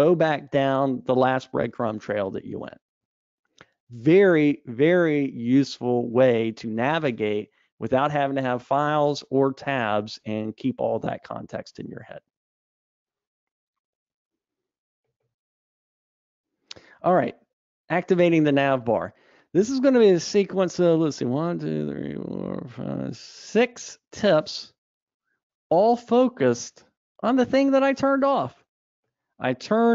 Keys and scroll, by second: 11.7 alt+super+[.